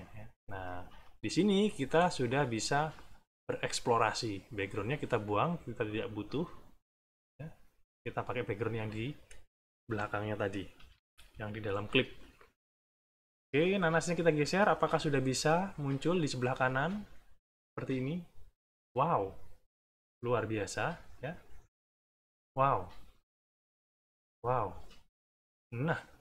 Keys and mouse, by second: 0.5 click, 1.0 click, 2.2 click, 6.2 click, 7.8 middle click, 9.8 middle click, 10.8 =, 11.4 middle click, 13.3 click, 14.5 click, 17.2-18.5 drag, 21.3 click, 22.9-24.2 drag, 24.5 click, 26.0-26.2 drag.